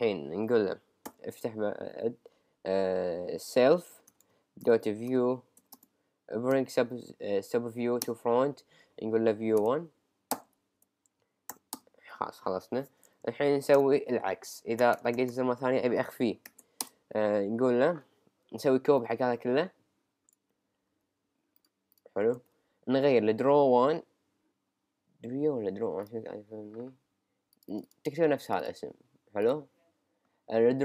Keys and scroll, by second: 1.1 [, 2.3 [, 4.2-5.0 typing, 5.6 Return, 6.6 b, 8.3 b, 10.8 Right, 11.7 Return, 13.3 Down, 13.8 Return, 16.6 shift+[, 16.8 Return, 20.9 super+c, 22.4 super+v.